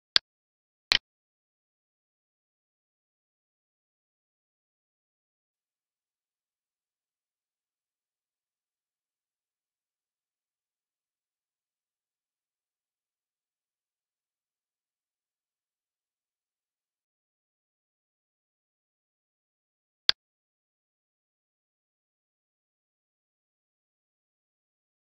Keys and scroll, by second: 5.4 alt+e, 16.9 alt+e.